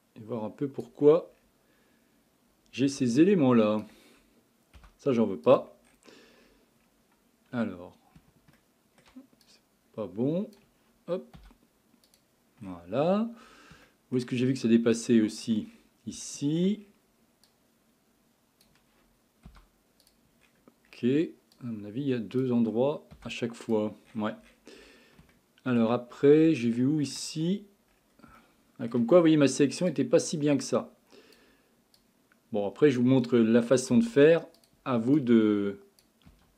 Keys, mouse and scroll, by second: 1.3-3.2 scroll up 5, 3.2 shift+click, 4.8 Delete, 5.9-6.5 scroll down 6, 6.5-8.6 scroll up 9, 8.6 shift+middle click, 9.5 click, 11.4 Delete, 12.6-13.9 scroll down 20, 13.9 shift+middle click, 14.4-15.1 scroll up 9, 15.1 shift+middle click, 15.7-16.2 scroll up 7, 16.2 shift+middle click, 16.8-17.5 scroll up 6, 17.5 click, 19.5 Delete, 20.4-20.9 scroll down 1, 20.9-21.5 scroll up 5, 21.5 click, 23.2 Delete, 24.1-25.3 scroll down 23, 25.3 shift+middle click, 26.1 scroll up 7, 26.6 shift+middle click, 27.4-28.4 scroll up 11, 28.4 shift+middle click, 29.2-29.9 scroll up 6, 29.9 click, 32.0 click, 33.9 Delete, 35.2 click, 36.3 Delete.